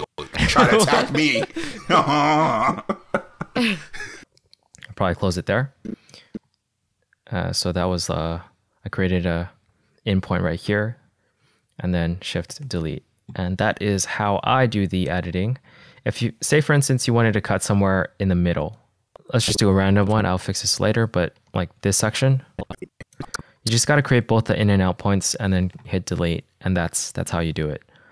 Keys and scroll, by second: 4.2 space, 6.9 -, 13.0 BackSpace, 15.6 -, 21.9 -, 23.9 =, 26.2 BackSpace.